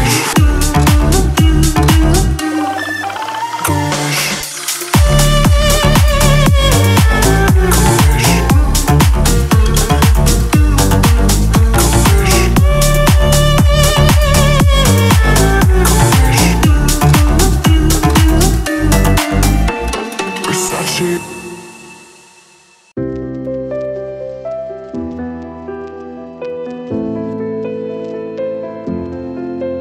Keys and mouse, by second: 3.8 Tab, 4.7 click, 4.7 a, 4.7 Tab, 5.4 right click, 5.4 Tab, 5.6 KP_1, 5.9 z, 8.0 z, 8.2 a, 8.4 Tab, 9.9 Tab, 10.0 a, 10.5 c, 13.2 Delete, 13.6 z, 14.4 middle click, 15.0 Delete, 15.6 middle click, 16.0 ctrl+z, 17.2 click, 17.6 click, 18.3 click, 18.4 click, 18.7 ctrl+z, 18.9 ctrl+z, 19.4 s, 19.7 click, 20.1 Tab, 20.6 Delete, 22.0 right click, 22.1 Delete, 23.1 ctrl+z, 23.4 s, 23.6 click, 23.9 click, 24.2 middle click, 24.3 right click, 24.5 Delete, 24.8 Delete, 25.1 middle click, 25.7 ctrl+z, 25.8 ctrl+z, 26.2 s, 27.0 g, 27.9 Delete, 28.1 KP_Decimal, 28.5 Delete, 28.8 Tab, 29.0 Tab, 29.1 click.